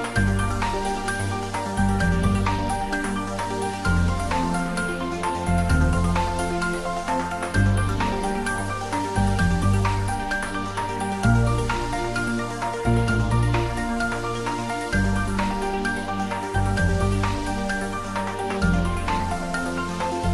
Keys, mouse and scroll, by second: 0.1 z, 1.1 click, 2.3 Tab, 2.6 scroll up 1, 3.6 ctrl+r, 4.0 click, 5.9 click, 7.0 s, 9.2 click, 9.6-10.8 middle drag, 10.8 3, 11.1 click, 11.7 s, 12.9 click, 13.3 g, 13.6 z, 14.7 click, 14.9 s, 15.4 click, 15.6 middle click, 16.5 click, 17.1 ctrl+b, 18.9 scroll up 1, 19.7 click, 20.1 Tab.